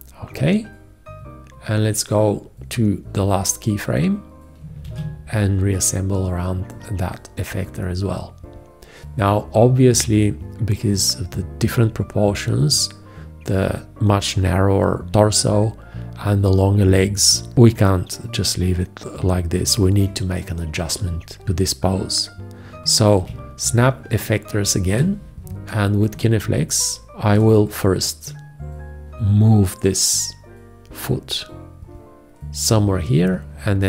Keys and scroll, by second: 4.9 ctrl+`.